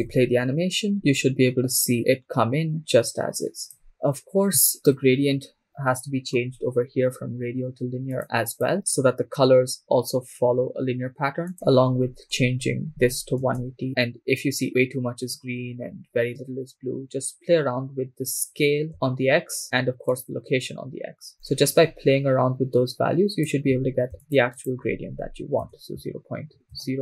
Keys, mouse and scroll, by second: 0.1 shift+space, 0.9 shift+space, 2.7 click, 3.8-5.5 scroll up 5, 5.7 middle click, 7.3-8.2 scroll up 1, 8.2 scroll up 1, 8.2 click, 11.5-13.6 drag, 16.2-16.7 scroll down 1, 18.9-23.5 shift+drag, 24.2-26.7 drag.